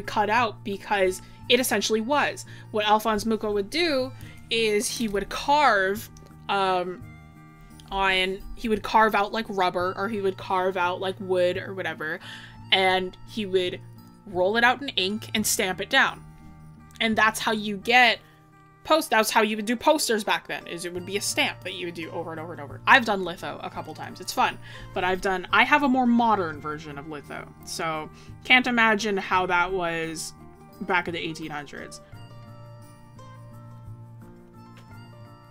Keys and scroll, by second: 1.5 scroll.